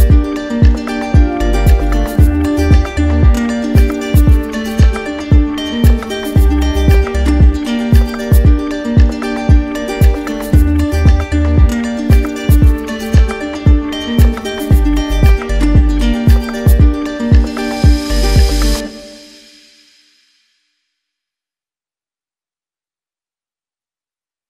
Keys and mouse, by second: 0.3 shift+click, 1.9 shift+click, 2.3 shift+click, 3.3 click, 4.0 click, 4.4 click, 5.0 shift+click, 7.6 right click, 8.3 right click, 9.1 click, 9.6 shift+right click, 10.3 shift+click, 10.9 shift+click, 11.2 shift+click, 11.7 shift+click, 12.5 shift+click, 13.2 shift+click, 14.7 shift+click, 15.8 shift+click, 16.9 shift+click, 18.5 shift+click, 19.5 shift+click, 19.8 shift+click, 20.3 shift+click, 20.7 shift+click, 21.3 shift+click, 21.7 shift+click, 22.1 shift+click.